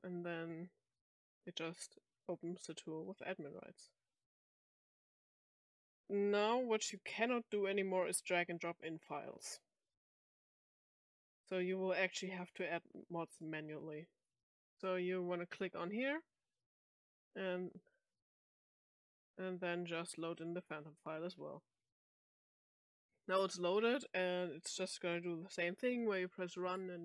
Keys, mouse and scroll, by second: 5.6 click, 7.2-9.5 drag, 10.2-10.5 drag, 10.8-27.0 drag.